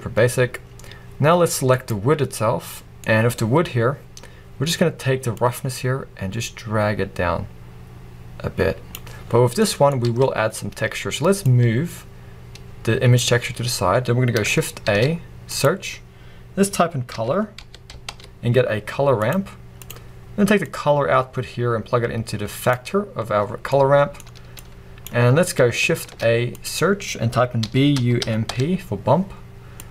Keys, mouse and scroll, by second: 0.1-1.4 scroll up 1, 5.6-29.9 drag.